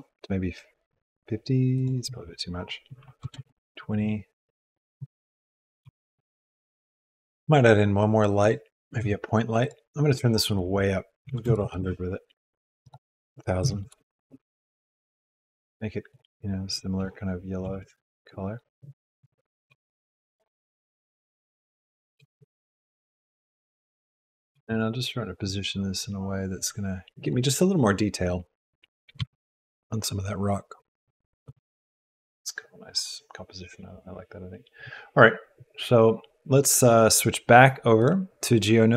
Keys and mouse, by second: 1.7-3.3 drag, 5.8 r, 6.0 shift+a, 8.9 g, 10.5-11.8 drag, 11.6 KP_0, 12.8-14.3 drag, 15.3 click, 17.6 g, 19.6 g, 22.1 g, 24.5 g, 29.1 g, 38.1-38.9 drag.